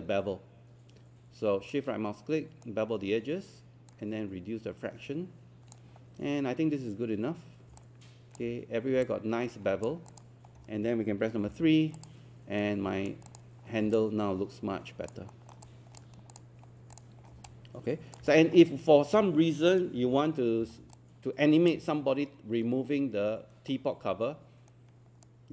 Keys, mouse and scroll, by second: 1.7-3.4 shift+right drag, 3.9-6.4 drag, 7.8 alt+click, 9.1 alt+click, 10.5 scroll down 1, 11.5 alt+3, 12.0 click, 12.6 right click, 13.3 click, 13.7 scroll down 1, 14.0 alt+click, 15.3 alt+middle click, 15.7 alt+click, 16.3 click, 17.3 scroll down 1, 17.5 alt+click, 18.3 scroll up 1, 19.3 scroll down 1, 19.6 scroll up 1, 20.6 scroll down 1, 21.0 alt+click, 24.7 right click.